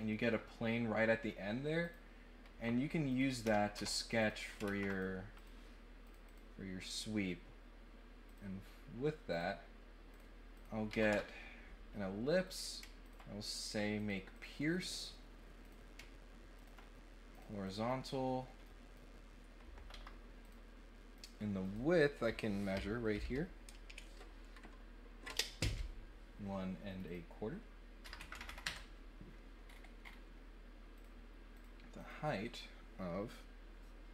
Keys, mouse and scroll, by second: 0.1 middle click, 0.1 scroll up 1, 1.8 click, 3.1 click, 3.7 Tab, 4.1 click, 4.8 click, 5.3 click, 6.0 click, 6.2 click, 8.2 click, 9.3 click, 10.1 click, 10.5 click, 12.4 click, 13.0 ctrl+click, 13.9 click, 14.3 click, 15.6 click, 16.5 ctrl+middle click, 17.3 click, 17.6 click, 17.9 right click, 18.6 right click, 20.4 click, 21.1 click, 21.6 click, 26.8 click, 27.0 click, 29.6 middle click, 29.6 scroll, 30.0 middle click, 30.0 scroll, 30.9 click, 31.5 click, 31.9 click.